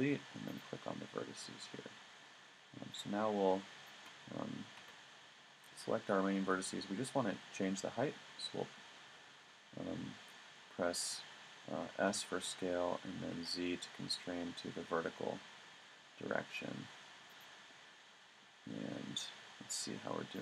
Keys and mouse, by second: 1.9-4.8 middle drag, 4.8 a, 12.1 s, 17.4 click, 18.2-19.7 middle drag.